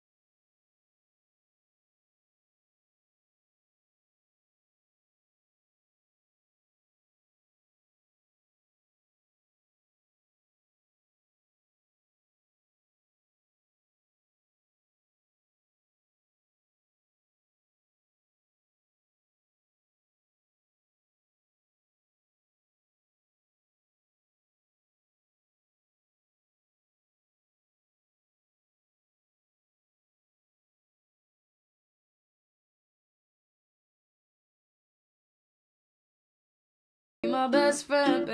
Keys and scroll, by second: 11.8 ctrl+d.